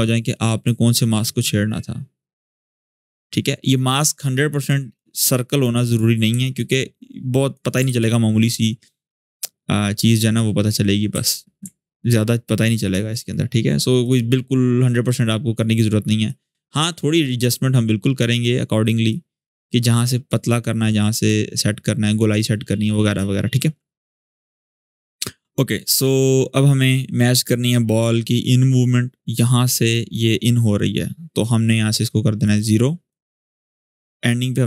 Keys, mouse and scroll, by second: 6.3-7.5 alt+drag, 7.6 ctrl+z, 8.9-10.1 alt+drag, 10.9 g, 11.8-12.7 alt+drag, 24.7 scroll down 1, 25.9-30.0 drag, 32.2-33.1 drag.